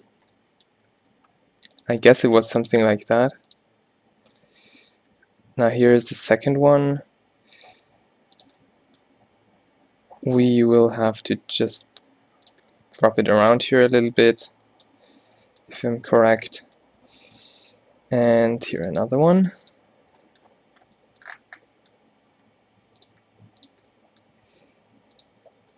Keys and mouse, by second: 1.0 shift+d, 2.0 e, 2.7 e, 4.4 middle click, 5.3 z, 5.9 z, 6.7 g, 7.8 e, 8.7 middle click, 11.2 e, 11.9 e, 12.3 click, 13.6 e, 16.0 Tab, 16.4 Tab, 17.5 shift+d, 18.5 e, 19.0 e, 22.5 e, 23.2 e, 24.6 g.